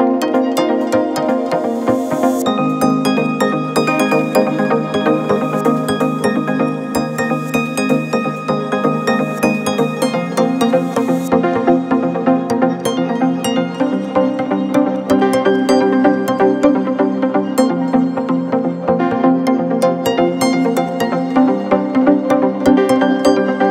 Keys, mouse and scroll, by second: 0.4 shift+click, 0.7 shift+click, 1.7 g, 5.1 ctrl+r, 8.4 ctrl+r, 11.9 drag, 12.7 click, 13.7 shift+click, 15.4 p, 17.5 Tab, 18.5-18.9 drag, 19.5-22.0 middle drag, 22.0 Tab.